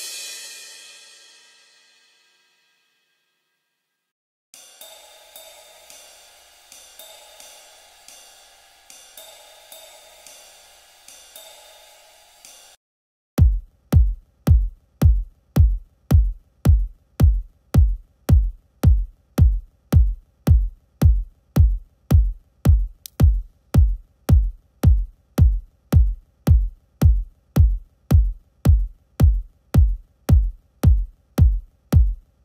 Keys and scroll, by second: 4.0 typing, 12.7 s.